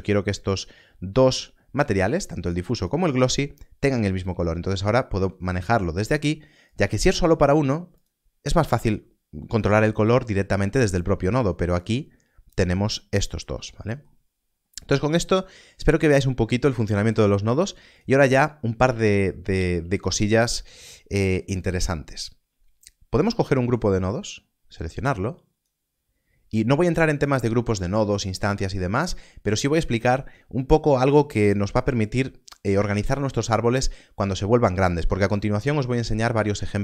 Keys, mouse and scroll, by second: 11.7 click, 14.1-15.2 scroll down 1, 15.2 click, 23.8 click.